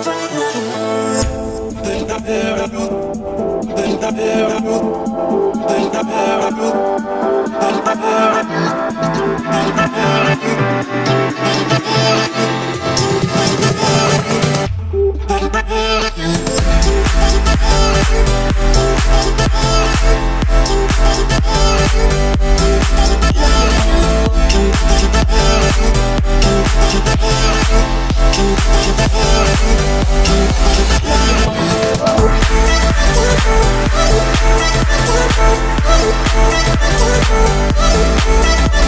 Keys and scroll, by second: 2.3 Delete, 8.4 Escape, 14.5 Escape, 15.7 Delete, 17.8 1, 17.9 0, 18.2 Return, 31.7 Escape, 38.5 5.